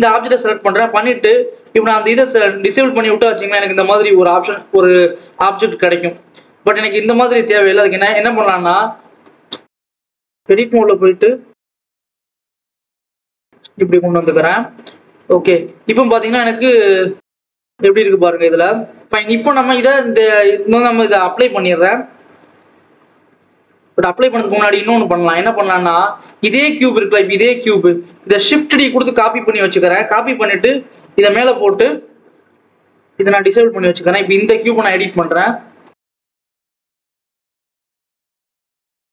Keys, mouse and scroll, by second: 1.5 click, 2.0-3.3 scroll up 1, 3.3 click, 5.7 click, 6.3-7.7 scroll up 1, 7.7 click, 8.1 click, 8.5-9.2 scroll down 1, 9.2 click, 10.0 click, 10.5 a, 10.8 g, 12.4 ctrl+s, 12.6-12.9 scroll down 1, 12.9 click, 13.4 scroll up 1, 13.6-14.1 scroll down 2, 14.1-15.1 scroll up 1, 15.1 click, 16.2 Tab, 17.1 click, 17.6 click, 19.0-19.4 scroll up 2, 19.4-19.8 scroll down 1, 19.8 ctrl+s, 20.2 click, 20.6-23.2 scroll up 1, 23.2 click, 24.4 click, 25.3 click, 25.8-26.4 scroll down 1, 26.4-28.2 scroll down 1, 28.2 shift+d, 30.4 click, 32.9 click, 34.4 click, 35.3-36.6 drag, 37.2 shift+click, 37.7 shift+click, 38.0 g, 38.2 scroll up 1, 38.3 ctrl+s, 38.4 click, 38.6 scroll down 1, 38.8-39.1 scroll up 1.